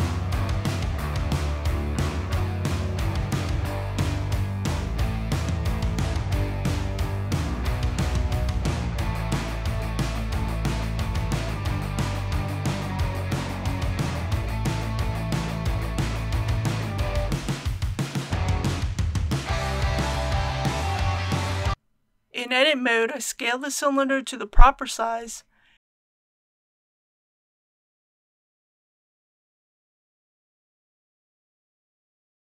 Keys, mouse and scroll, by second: 2.6 click, 4.2-4.8 typing, 6.2 s, 8.9 click, 9.5-10.4 typing, 12.9 click, 13.8-14.3 typing, 16.9 click, 17.4 typing, 19.4 shift+z, 22.6 middle click, 23.1 typing, 23.7 alt+a, 24.3 alt+c, 24.7 click, 25.0 right click, 25.6-26.9 typing, 30.7 click.